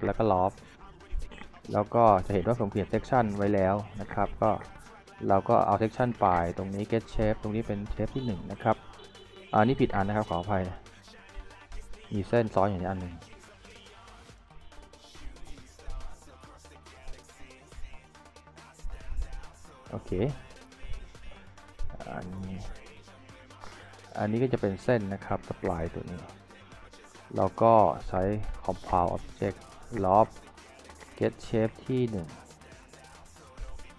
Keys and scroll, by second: 21.2 z.